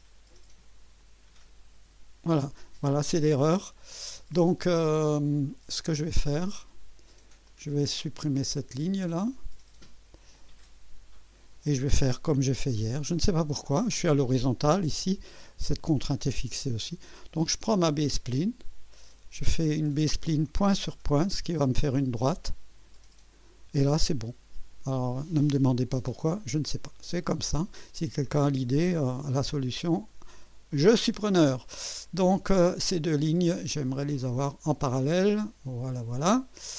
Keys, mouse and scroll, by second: 1.0 click, 4.2 click, 5.9 click, 7.5 click, 7.9 click, 9.1 right click, 10.3 click, 11.0 Delete, 12.3 scroll up 2, 12.9 scroll down 2, 15.5-16.2 drag, 18.0 click, 19.9 click, 22.3 click, 23.0 right click, 26.4 right click, 29.5 click, 31.0 click, 34.1 click.